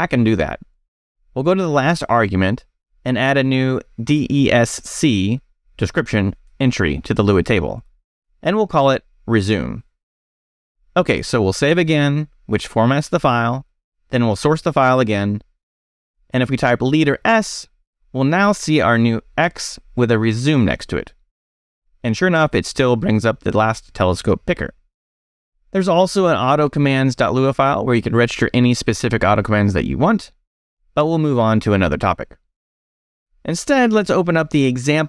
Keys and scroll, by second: 0.2 Escape, 2.8 shift+a, 4.5 Left, 5.2-11.7 typing, 8.5 shift+Left, 10.7 Escape, 11.8 Return, 12.6 shift+Return, 12.7 shift+;, 14.0 s, 14.2 space, 15.4 shift+5, 15.5 shift+Return, 16.5 Return, 16.9 space, 17.5 s, 21.5 x, 24.4 Escape, 25.2 shift+Escape, 25.3 shift+;, 26.2 shift+q, 26.4 Return, 26.6 e, 32.0 j, 32.3 Return, 32.8 j.